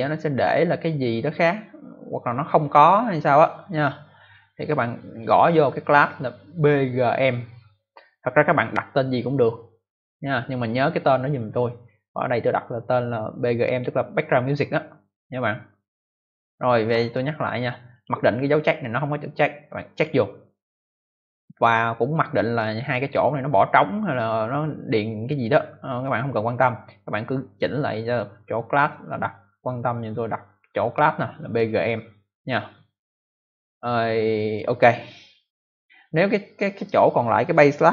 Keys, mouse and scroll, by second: 5.2 click, 17.8 click, 19.9 click.